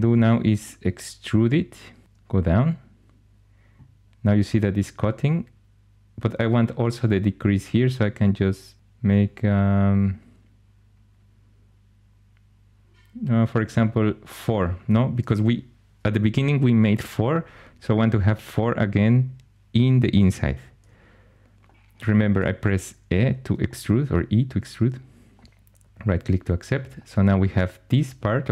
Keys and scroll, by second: 2.0 e.